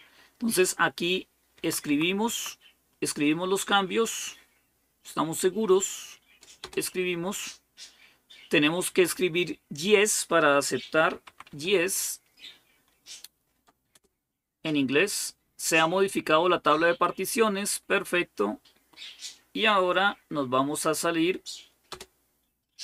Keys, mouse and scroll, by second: 1.3 Right, 1.6 Right, 2.0 Right, 6.4 Return, 10.7-11.8 typing, 13.7 Return, 21.7 Return.